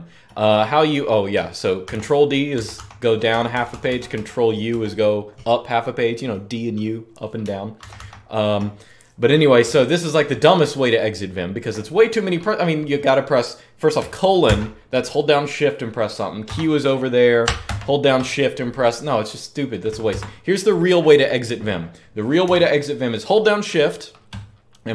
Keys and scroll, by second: 1.6 ctrl+d, 2.3 ctrl+d, 2.5 ctrl+d, 3.3 c, 7.6 ctrl+d, 7.7 ctrl+d, 9.4-10.3 typing, 14.2 :, 17.2-17.9 typing, 19.9 Escape, 22.3 Escape.